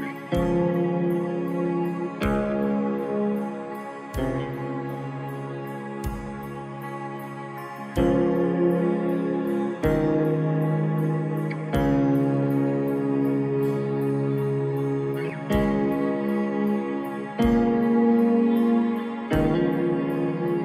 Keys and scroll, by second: 0.4 space, 13.0 ctrl+i, 17.9 ctrl+-.